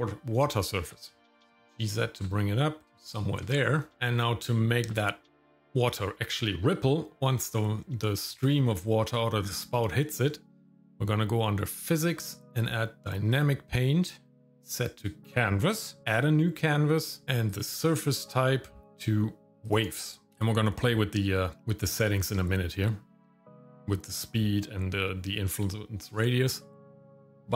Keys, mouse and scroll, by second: 1.0 shift+middle click, 1.2 scroll up 1, 1.3 g, 2.8 scroll up 1, 2.9 scroll down 1, 3.2 shift+middle click, 3.5 middle click, 3.9 scroll down 1, 3.9 shift+middle click, 7.2 shift+middle click, 11.7 click, 13.3-16.0 drag, 17.5-19.7 drag, 20.3-21.6 scroll down 2.